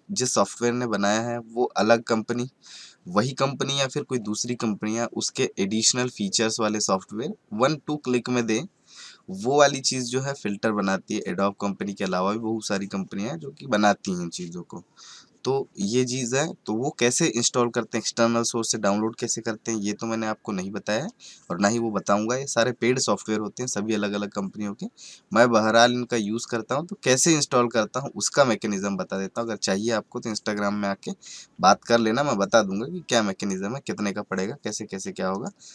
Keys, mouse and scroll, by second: 31.8 click, 35.3 right click.